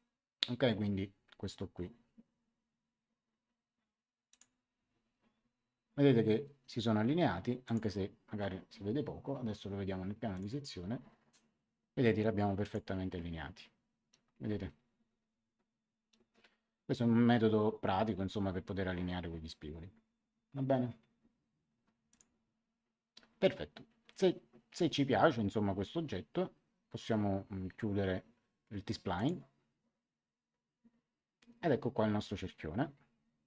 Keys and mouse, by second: 4.2 click, 7.6 click, 10.3 click, 12.6 click, 22.1 click, 29.1 click.